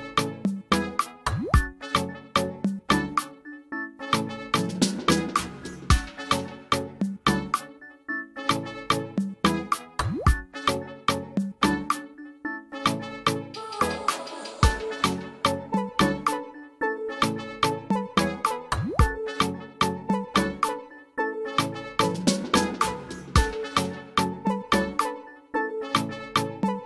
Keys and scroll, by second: 0.0-2.5 typing, 9.3-10.2 typing, 12.9 typing.